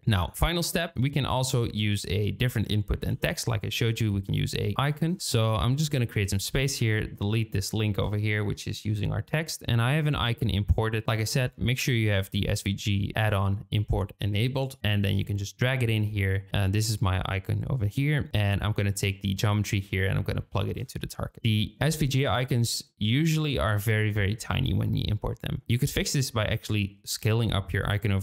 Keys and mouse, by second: 0.0 shift+click, 0.4 shift+click, 1.3 shift+click, 2.0 click, 3.0 g, 5.2 shift+middle click, 6.5 ctrl+click, 7.6 shift+middle click, 14.8-15.7 drag, 16.5-18.3 drag, 18.7-21.0 drag.